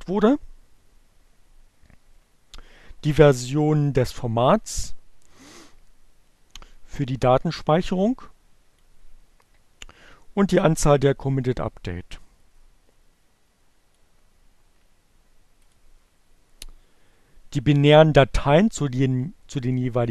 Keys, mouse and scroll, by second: 4.8-7.9 drag, 11.9-13.5 drag, 14.5 click.